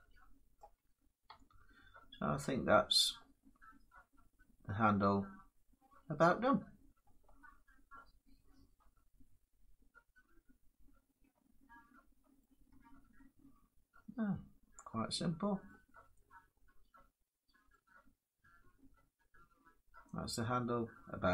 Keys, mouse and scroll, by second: 0.1 scroll down 2, 0.3 middle click, 0.4 Tab, 1.0 Tab, 1.9 middle click, 2.7 Tab, 2.8 middle click, 5.7-9.0 middle drag, 10.4-11.5 middle drag, 11.7 middle click, 12.1 middle click, 12.4 Tab, 13.0 middle click, 13.1 middle click, 13.5 middle click, 13.7 middle click, 15.4 middle click, 17.5 middle click.